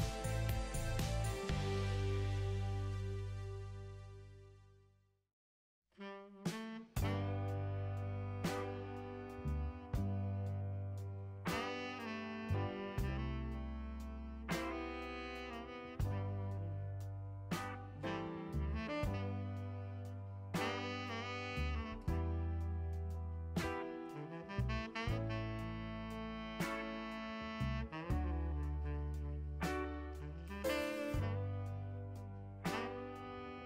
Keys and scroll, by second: 17.7 Delete, 25.5 t, 27.0 Return.